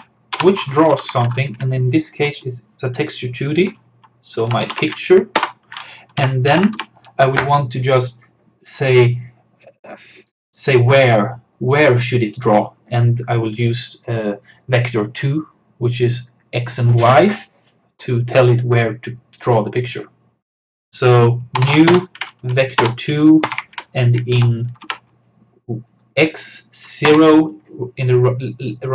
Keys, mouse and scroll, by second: 0.0-1.0 typing, 4.2-6.2 typing, 5.4 Return, 6.8 Down, 21.4-22.2 typing, 22.8 Return, 23.5 shift+8, 24.4 Down, 27.1 0.